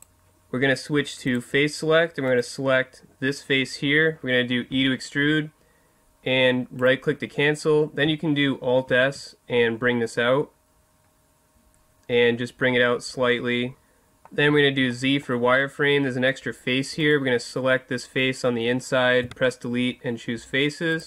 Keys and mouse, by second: 1.2-3.1 drag, 2.3 right click, 4.7 e, 6.8 right click, 6.9-8.1 drag, 8.8 alt+s, 13.7 middle click, 14.1 click, 14.5 z, 17.0 right click, 19.2 Delete.